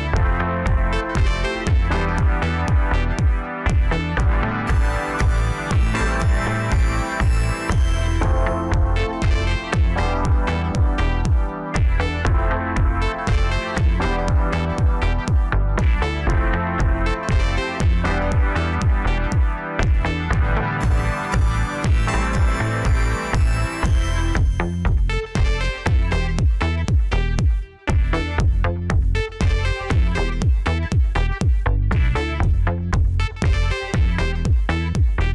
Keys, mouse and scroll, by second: 0.3 click, 2.4-3.4 scroll down 2, 3.5 click, 6.5-9.0 drag, 9.0 0, 12.3-12.9 scroll down 2, 12.9 scroll up 1, 17.8 click, 21.0 click, 21.8-23.1 scroll up 1, 23.4 click, 24.4 scroll up 2, 24.8-27.4 scroll down 3, 27.4 Tab, 32.9-33.8 drag, 34.4-35.3 drag.